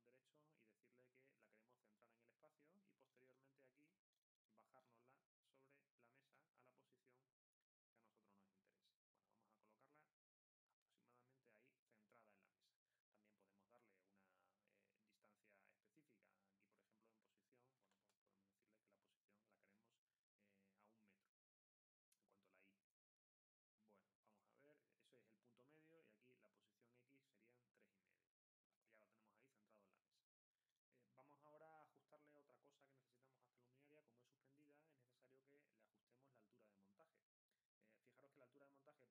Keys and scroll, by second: 17.8 1.